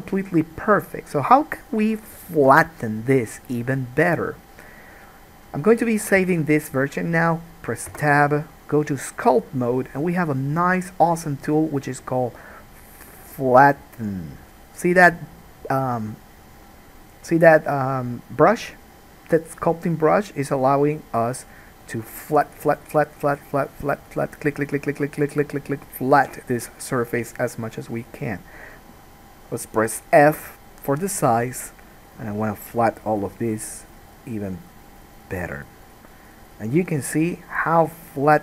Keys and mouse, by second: 6.5 ctrl+s, 8.1 Tab, 14.6-32.3 drag, 30.4 f, 32.3 middle click, 32.8-38.4 drag.